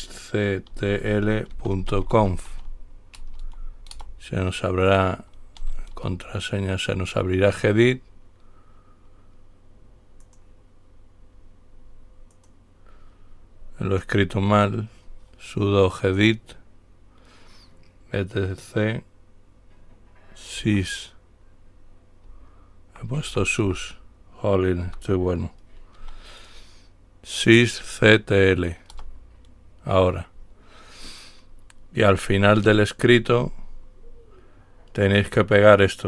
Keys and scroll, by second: 0.9-3.6 typing, 4.2 Return, 6.2 Return, 6.4 typing, 7.7-8.7 typing, 22.5 Up, 22.5 Left, 23.0 typing, 23.2 Left, 23.5 Left, 23.8 Left, 25.1 Delete, 26.2 y, 29.2 Return.